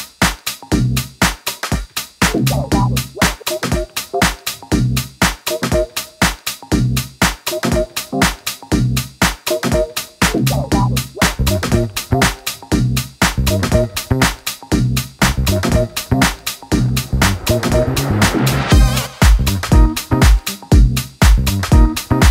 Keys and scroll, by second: 1.5 super+d, 1.9 super+d, 3.8 super+d.